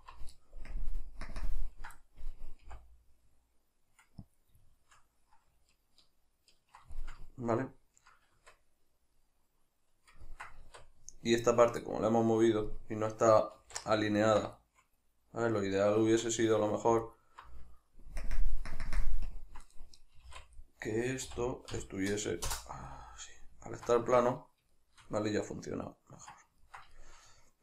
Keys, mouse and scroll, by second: 0.7 ctrl+KP_Add, 1.3 ctrl+KP_Subtract, 4.4 click, 4.7-10.7 shift+middle drag, 8.3 Tab, 10.7 Tab, 11.5 right click, 11.9 middle click, 13.6 alt+q, 14.2 ctrl+middle click, 16.1 Tab, 17.1 alt+right click, 18.1 ctrl+KP_Add, 18.7 ctrl+KP_Subtract, 20.2 s, 22.9-27.6 middle drag, 24.1 Tab.